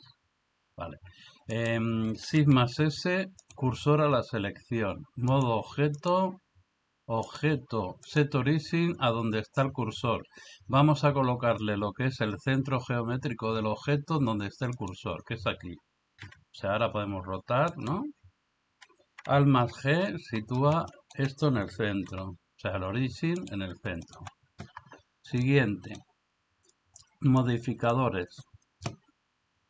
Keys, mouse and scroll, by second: 0.0 n, 2.3 shift+s, 5.3 click, 7.3-14.9 drag, 16.3 r, 19.7 alt+g, 22.1 r, 24.0 middle click, 25.4-25.9 middle drag, 27.4 click.